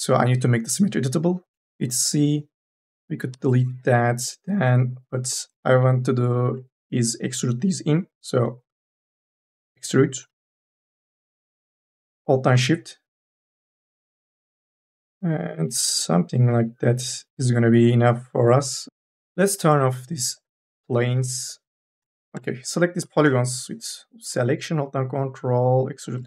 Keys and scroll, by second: 1.5 c, 3.1 BackSpace, 20.7 3, 21.9 e, 23.3 u, 23.7 l, 24.0 e.